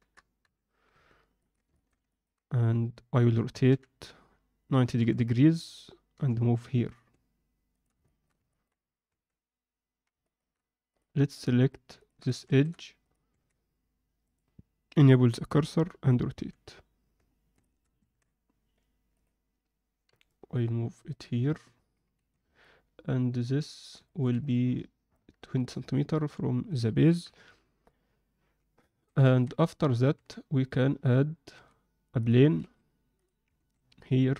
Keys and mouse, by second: 0.4 KP_7, 1.4 ctrl+middle click, 1.7 alt+shift+middle drag, 2.0 ctrl+middle click, 3.6 r, 6.1 g, 8.0 alt+shift+middle drag, 8.4 ctrl+middle click, 9.0 Tab, 10.2 alt+shift+middle click, 10.8 click, 11.3 shift+click, 12.4 shift+s, 13.2 Tab, 14.2-15.1 drag, 16.3 r, 18.0 Tab, 20.0 g, 22.1 z, 22.6-23.8 alt+middle drag, 24.0 ctrl+alt+middle click, 24.4 middle click, 25.6 middle click, 27.2 KP_7, 28.8 shift+middle click, 29.2 ctrl+middle click, 30.1 Tab, 32.2 click, 32.6 shift+s, 33.6 shift+a.